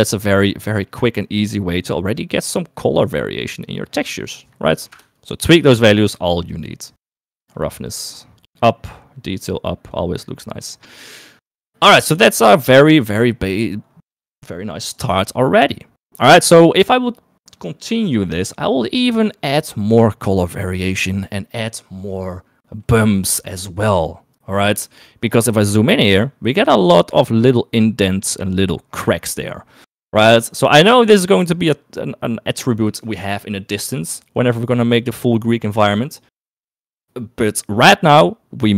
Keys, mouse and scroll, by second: 4.3 middle click, 5.0 click, 8.3-9.4 drag, 9.7 click, 11.1 click, 13.0 shift+middle click, 26.9 shift+middle click, 30.6 shift+middle click, 31.4 shift+middle click.